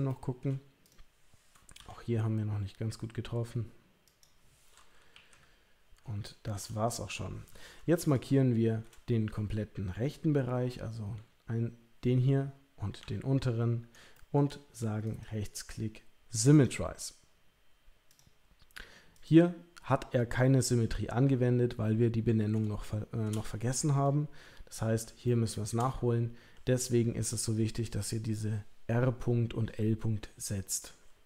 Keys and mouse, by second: 0.1 shift+middle click, 0.8 click, 1.7 g, 5.1 KP_1, 6.2 shift+middle click, 11.1 l, 13.0 l, 14.1 shift+middle click, 15.1 right click, 18.1 click, 19.1 click, 22.8 shift+middle click, 25.2 shift+middle click.